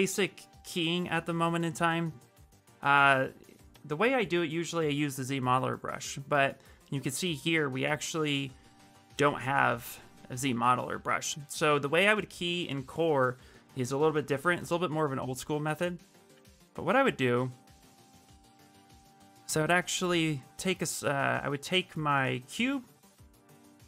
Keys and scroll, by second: 3.5 q, 4.9 b, 17.4 shift+w, 20.4 q.